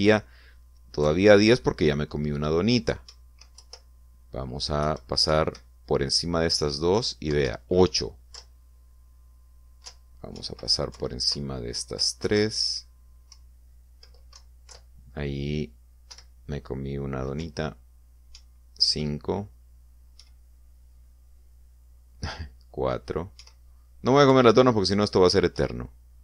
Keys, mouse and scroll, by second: 2.1 Left, 4.2 Right, 4.6 Left, 5.9 Left, 6.4 Right, 8.6 Down, 9.4 Left, 10.9 Up, 11.5 Right, 12.0 Left, 14.4 Left, 15.4 Down, 15.8 Left, 17.2 Down, 18.5 Up, 19.4 Right, 21.3 Right, 24.5 Right, 25.4 Right.